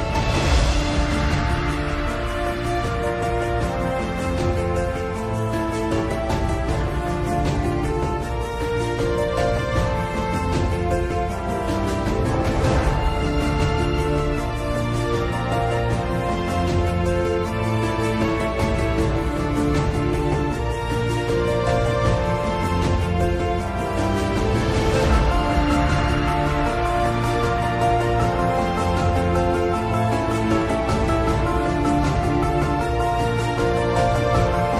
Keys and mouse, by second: 4.6-5.7 middle drag, 6.7-8.3 drag, 27.3 middle click.